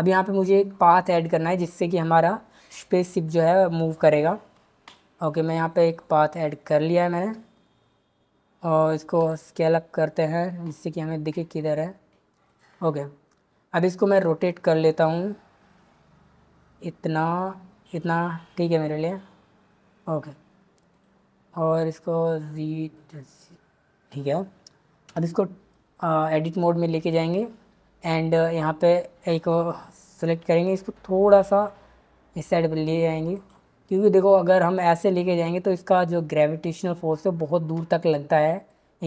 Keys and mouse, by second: 0.4 shift+a, 9.2 s, 14.1 r, 20.9 click, 21.8 g, 22.9 click, 25.2 Tab, 28.6 click, 31.3 g, 33.3 click.